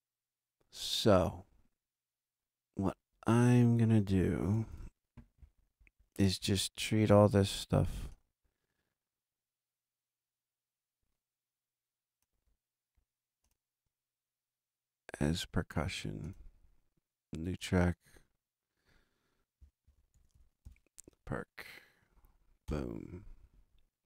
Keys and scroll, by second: 4.7 super+=, 19.8 alt+shift+p, 19.9-21.1 typing, 22.6 Return.